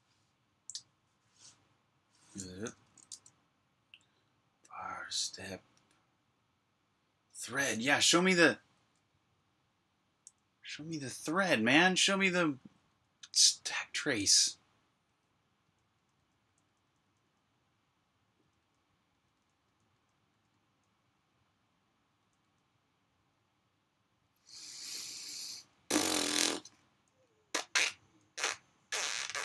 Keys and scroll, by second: 2.7-4.0 typing, 5.1 k, 10.1 k, 12.0-13.4 typing, 14.7-20.6 typing, 21.8-23.0 typing, 24.1-29.4 typing.